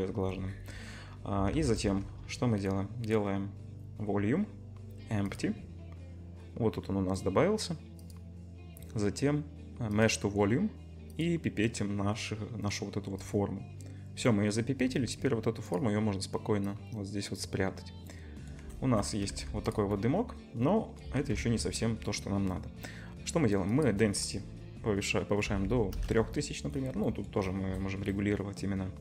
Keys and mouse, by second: 1.5 shift+a, 11.2-15.6 middle drag, 15.6 click, 15.7 middle click, 16.6-19.7 drag, 19.4 ctrl+s, 19.7-23.7 middle drag, 21.6 KP_0, 23.7-29.0 drag.